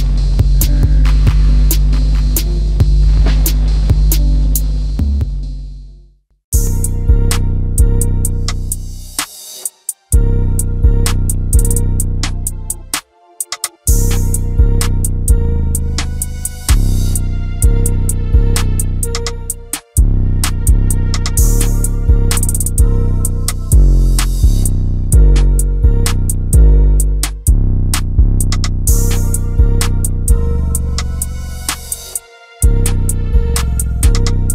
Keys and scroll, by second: 1.6 space, 14.5 space, 15.3 m, 15.9 b, 16.5 space, 16.5 Escape, 16.8 Escape, 33.7 typing.